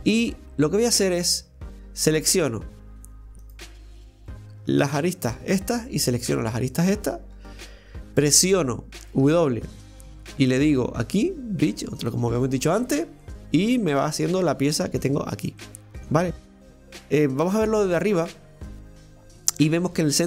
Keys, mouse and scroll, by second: 0.4-0.9 scroll up 1, 0.9-2.3 middle drag, 2.3 right click, 3.4 click, 4.3 right click, 4.7 alt+shift+right click, 4.9 alt+shift+right click, 5.9-7.1 middle drag, 7.1 alt+shift+right click, 9.2 w, 12.7 scroll down 1, 13.2-15.3 middle drag, 15.3-15.6 scroll down 1, 15.6-17.4 middle drag, 17.4 KP_7, 20.0 shift+middle click.